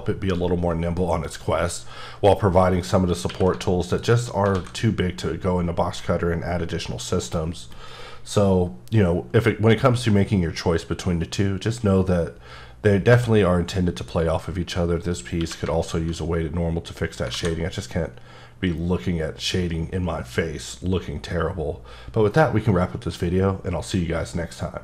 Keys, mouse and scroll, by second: 3.3 q, 3.9 click, 4.5 a, 14.0 click, 15.4 q, 15.8 alt+click, 17.3 alt+a.